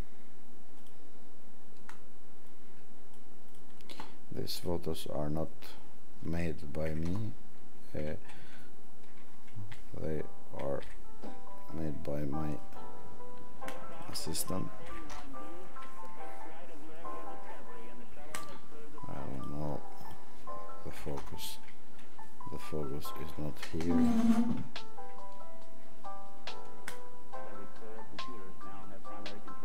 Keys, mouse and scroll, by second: 13.9 click, 14.8 click.